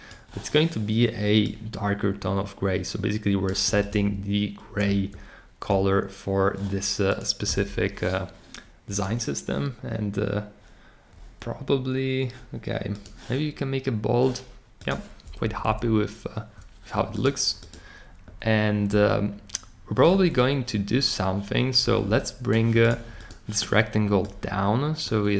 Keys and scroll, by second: 15.4 Down, 15.6 Down.